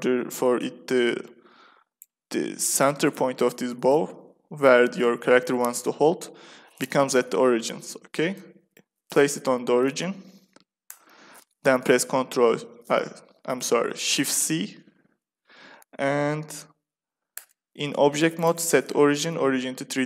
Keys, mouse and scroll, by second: 2.6-6.3 middle drag, 6.8 shift+c, 7.8-10.4 middle drag, 10.8 Tab, 10.8 click, 14.3 shift+c, 17.2 Tab, 18.3-20.0 drag.